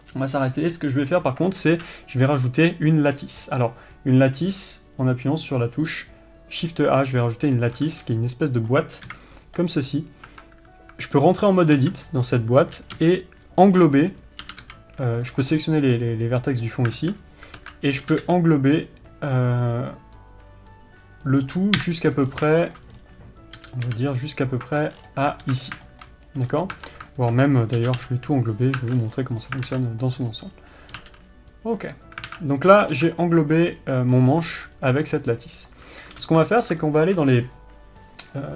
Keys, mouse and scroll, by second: 15.9-21.8 middle drag, 22.9-25.1 middle drag, 26.3-29.2 middle drag, 29.6-30.7 middle drag, 32.9-35.6 middle drag, 36.6 ctrl+space, 37.2-38.5 shift+middle drag.